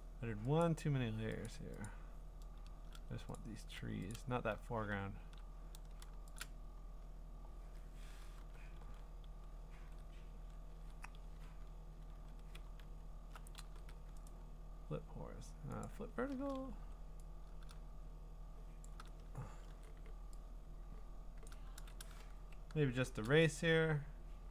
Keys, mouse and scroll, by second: 0.6 click, 1.5 click, 1.9 click, 2.2-3.4 scroll, 3.4 shift+click, 4.1 click, 6.4 shift+click, 6.8-8.4 scroll, 8.4 ctrl+j, 8.4-8.8 scroll, 8.8 ctrl+r, 9.8 ctrl+e, 12.2 ctrl+r, 12.7-13.7 scroll, 13.7 ctrl+t, 14.3 right click, 16.0 click, 16.7 v, 18.8 shift+click, 19.4 Return, 19.7 e, 21.4 click, 21.7 ctrl+z, 22.2 ~.